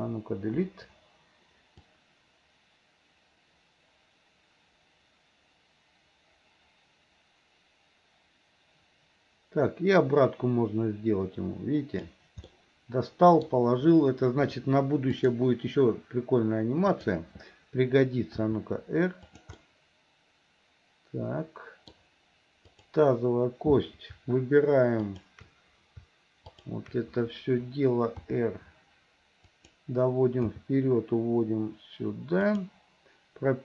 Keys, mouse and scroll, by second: 0.6 Delete, 1.9-12.2 drag, 12.5 middle click, 16.9 click, 18.4 r, 19.6-21.9 middle drag, 22.7 click, 25.1 shift+click, 26.6 shift+click, 28.3 r, 30.4 g.